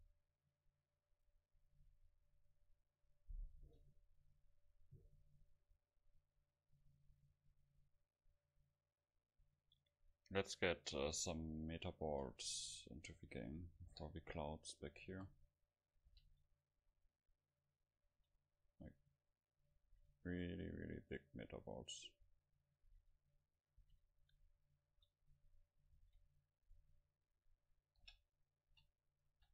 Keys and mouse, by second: 11.5-12.8 middle drag, 12.7 KP_7, 13.9 g, 14.9-16.7 drag, 15.2 KP_0, 16.1 g, 16.8-18.4 drag, 16.8 s, 18.2 s, 18.5 click, 18.7 click, 19.9 shift+d, 20.8-22.7 drag, 22.1-23.3 middle drag, 22.9 shift+d, 23.6-26.2 drag, 23.9 shift+d, 25.0 s, 26.0 shift+d, 28.1 g, 28.8 s, 29.3 click, 29.3 g.